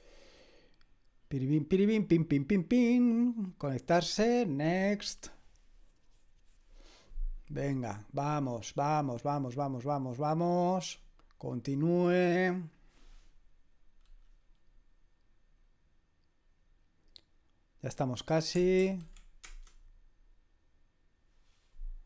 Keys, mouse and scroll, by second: 4.5 click, 11.8 click, 18.8 ctrl+l, 19.4 Return.